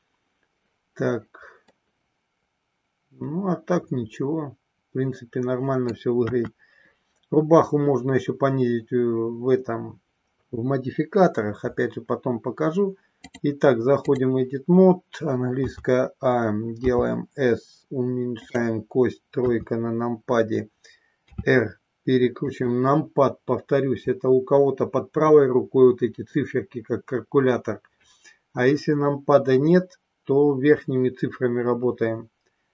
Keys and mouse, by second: 1.6-5.9 middle drag, 6.1 KP_1, 13.3 click, 15.7 a, 16.9 s, 18.4 click, 19.3 KP_3, 21.3 r, 22.4 click.